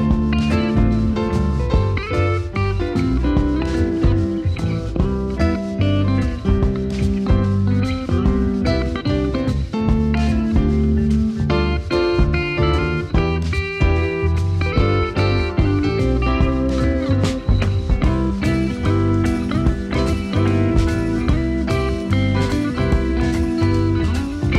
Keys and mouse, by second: 0.4 alt+middle click, 1.3 s, 2.3 click, 3.7 middle click, 5.1 shift+middle click, 5.7 click, 6.1 alt+middle click, 6.8 click, 6.9 Tab, 7.3 click, 8.4 Tab, 8.6 click, 11.4-13.3 alt+middle drag, 13.8 middle click, 16.0 Tab, 16.4 Tab, 17.0 click, 17.7 Tab, 18.2 Tab, 19.0 click, 19.7 Tab, 19.8 click, 21.2 click, 22.2 click, 22.3 Tab, 23.3 Tab, 23.7 click.